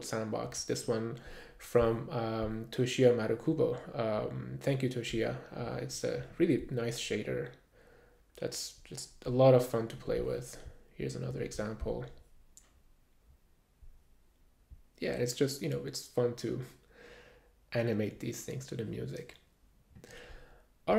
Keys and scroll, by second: 0.8 super+`.